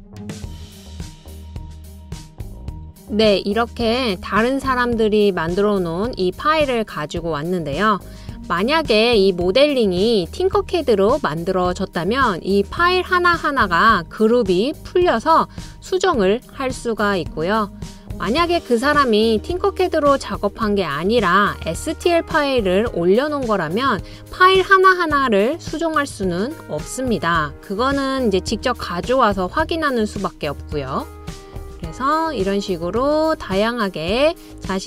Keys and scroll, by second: 7.3-8.1 typing, 9.2 typing, 10.3 typing.